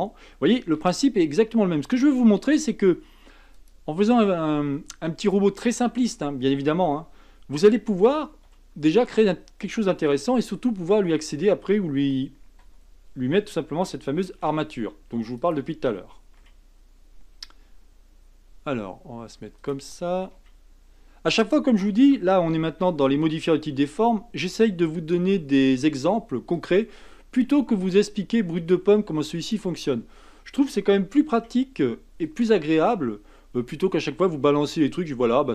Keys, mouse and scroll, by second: 0.8 g, 7.6 a, 8.4 l, 14.2 shift+d, 16.4 r, 20.3 g, 24.4 r, 27.6 s, 31.3 r, 33.6 g.